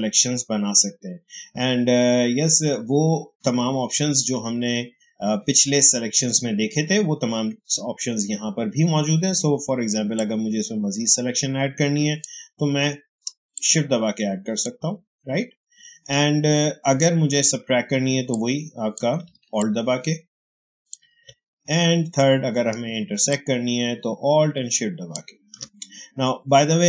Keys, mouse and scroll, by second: 10.0-17.8 shift+drag, 17.8 space, 18.2 click, 18.3 space, 19.5 alt+click, 19.5-23.5 alt+drag.